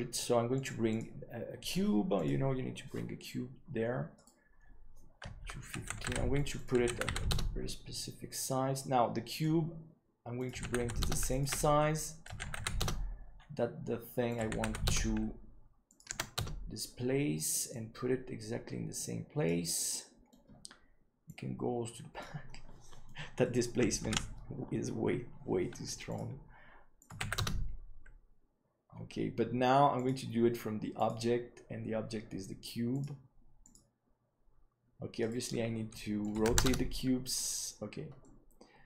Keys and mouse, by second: 0.5-3.0 drag, 4.2 right click, 5.6 click, 6.5 click, 9.4 click, 10.3 click, 11.4-13.1 drag, 14.3 click, 15.9 click, 17.7-19.5 drag, 19.9 middle click, 21.2-22.2 drag, 22.4-23.0 middle drag, 24.4 ctrl+s, 27.0-28.6 drag, 30.0-31.6 drag, 32.9 click, 36.4-37.7 drag, 38.2-38.8 middle drag.